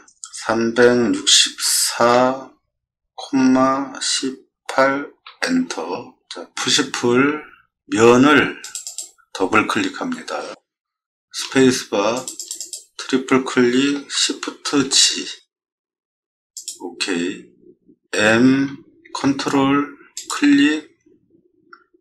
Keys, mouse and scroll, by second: 1.0 6, 2.1 4, 3.2 ,, 4.0 1, 4.7 8, 5.3 Return, 6.6 p, 8.6 click, 8.8 click, 11.4 space, 12.1 click, 12.4 click, 12.6 click, 14.7 shift+g, 16.5 click, 18.1 m, 20.1 click.